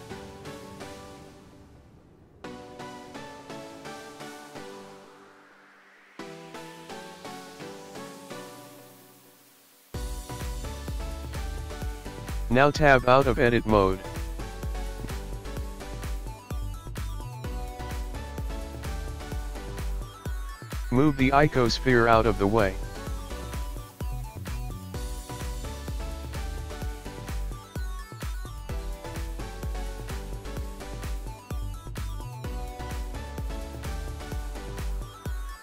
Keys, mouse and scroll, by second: 5.1-6.2 scroll down 4, 6.2 middle click, 7.8-11.3 scroll up 2, 11.3 Tab, 12.2-13.2 scroll up 1, 13.4 click, 19.7-20.2 scroll down 1, 20.2 scroll down 2, 21.4 click, 22.3 g, 25.4 click, 28.7-29.2 scroll up 1, 29.3-29.8 scroll down 1, 29.8 middle click, 30.6-31.1 scroll up 1, 31.1-31.6 scroll up 2, 31.6 click, 33.9 click.